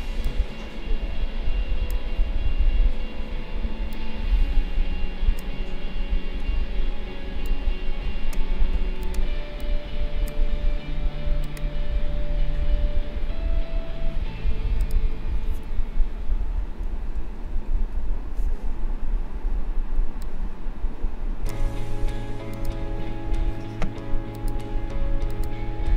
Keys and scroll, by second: 17.2 ctrl+=, 19.9 space.